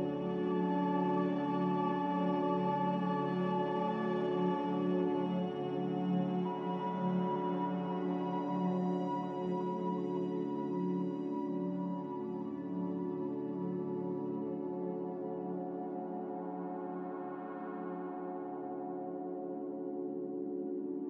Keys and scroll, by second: 0.0-0.6 typing, 3.2-4.0 typing, 6.7-7.3 typing, 11.3 F9, 13.9 a, 18.3 z.